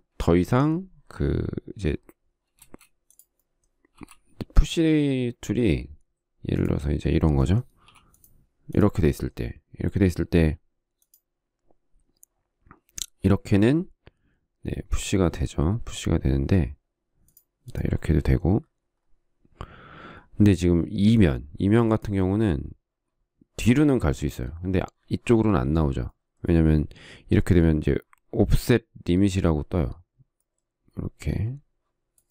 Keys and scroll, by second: 3.0 space, 4.4 m, 8.2 p.